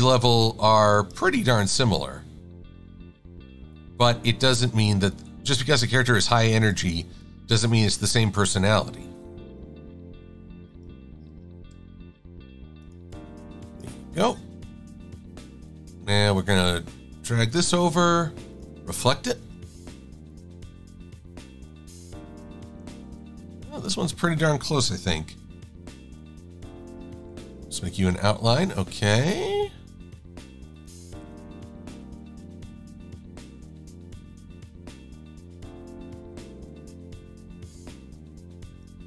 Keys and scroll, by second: 11.8 shift+a, 12.2 v, 19.0 KP_Enter, 27.9 shift+x.